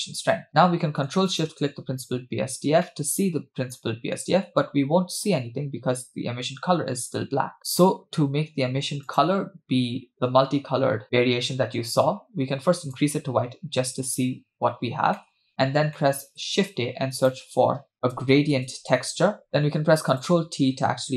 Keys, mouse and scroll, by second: 0.3 middle click, 1.6 ctrl+shift+click, 2.2-2.8 scroll down 1, 2.8 scroll down 2, 2.8-4.3 middle drag, 4.4-5.4 scroll up 3, 9.1 click, 15.2 middle click, 16.0 middle click, 16.5 shift+a, 20.4-21.1 ctrl+shift+drag.